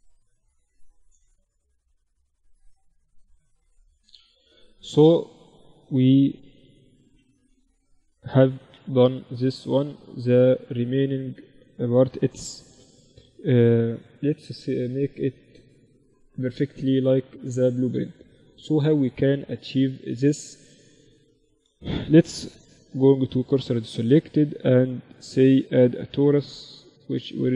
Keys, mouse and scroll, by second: 0.6 KP_7, 1.4 z, 2.6 e, 3.8 z, 4.4-6.5 middle drag, 6.5 f, 7.0 Tab, 8.2 KP_1, 8.6 Tab, 9.0 z, 20.0 Tab, 20.8 Tab, 21.8 shift+s, 23.3 Tab, 23.7 shift+a.